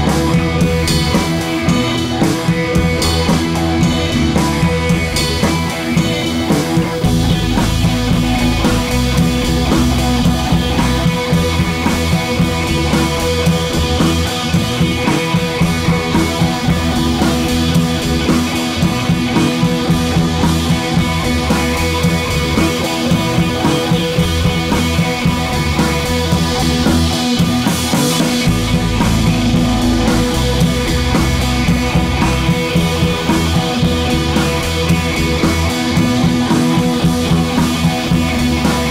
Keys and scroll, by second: 6.9 Left, 7.0 Left.